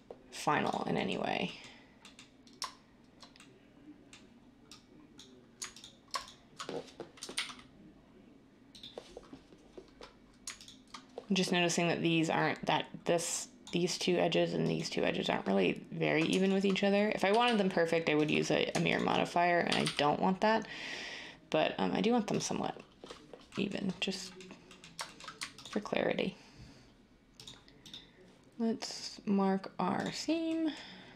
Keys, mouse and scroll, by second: 7.1 g, 7.3 g, 17.3 g, 17.4 g, 19.6 g, 19.8 g.